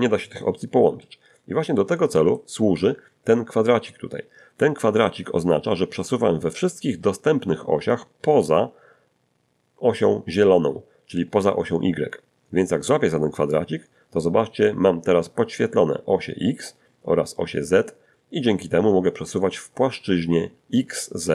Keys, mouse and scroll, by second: 1.0 middle click, 2.1 middle click, 2.1 scroll down 2, 13.5-21.3 drag.